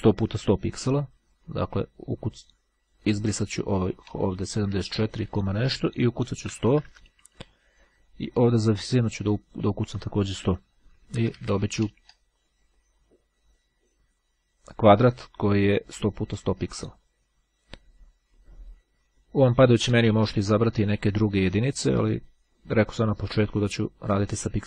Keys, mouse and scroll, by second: 3.2 click, 5.0 Delete, 5.4 KP_1, 7.1 KP_Enter, 9.4 click, 10.7 KP_1, 11.0 KP_Enter, 13.0-13.5 scroll up 2, 14.2-15.8 drag, 16.5 click, 19.2 click, 23.2-24.6 drag.